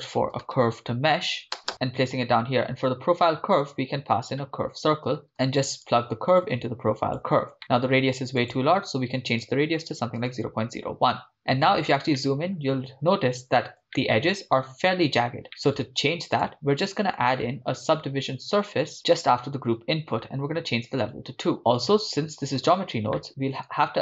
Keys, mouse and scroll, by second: 1.7 BackSpace, 3.3 shift+a, 5.9 click, 7.6 middle click, 8.4-10.6 drag, 11.3-11.7 middle drag, 11.7 scroll up 2, 12.2-12.6 shift+middle drag, 12.7-13.8 scroll up 1, 13.8 scroll up 1, 13.9-14.4 shift+middle drag, 15.6 scroll down 2, 15.6-15.9 middle drag, 16.5 click, 17.6 shift+a, 21.0-21.5 drag, 21.6 middle click, 22.0 click, 22.4 click, 23.2 middle click, 23.3 scroll up 3.